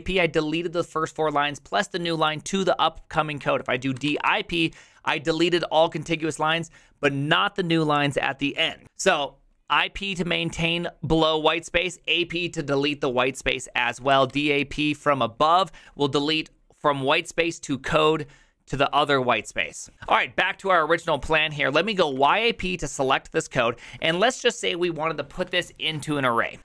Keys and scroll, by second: 0.0-0.4 typing, 3.7-4.8 typing, 13.9-14.8 typing, 19.9 ctrl+c, 19.9 u, 21.7-22.7 typing, 26.3-26.6 typing.